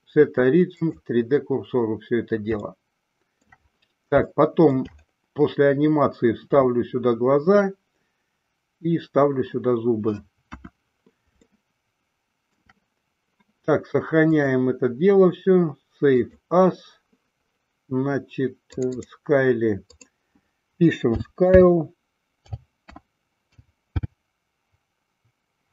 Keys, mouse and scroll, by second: 2.8-3.8 shift+middle drag, 4.4-5.0 shift+middle drag, 10.6 KP_1, 11.7-12.8 shift+middle drag, 14.3-16.8 drag.